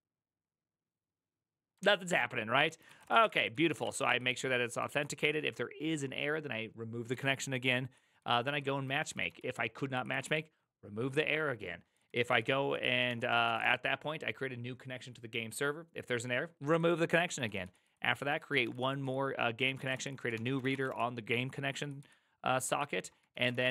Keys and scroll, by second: 1.8 ctrl+o, 2.6-5.1 typing, 7.1-10.6 typing, 11.7-14.0 typing, 17.1-23.7 typing.